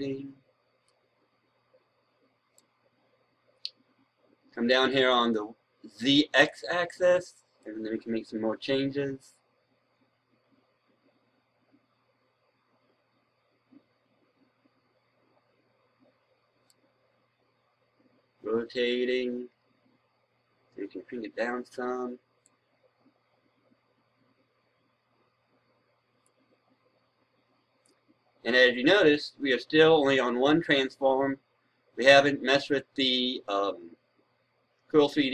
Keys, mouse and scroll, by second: 6.3 click, 7.5-11.5 right drag, 12.7-17.6 right drag, 18.7-20.4 scroll down 1, 20.4 scroll up 1, 22.3-35.3 drag.